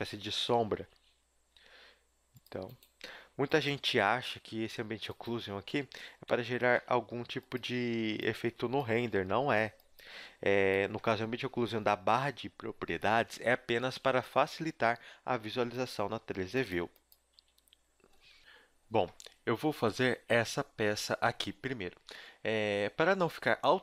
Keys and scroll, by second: 0.0-1.5 typing, 3.0 g, 3.8 a, 4.2 KP_3, 4.5 z, 5.4 ctrl+Tab, 6.3 Tab, 7.7 a, 7.9 b, 8.9 g, 10.3 z, 13.9 Tab, 14.5 Tab, 17.4 a.